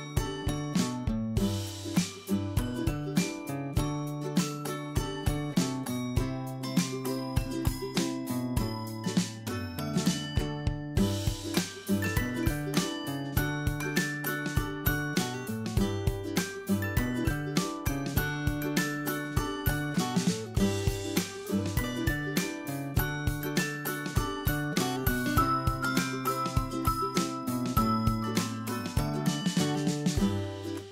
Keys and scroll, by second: 20.2 ctrl+Left, 29.9 ctrl+Left.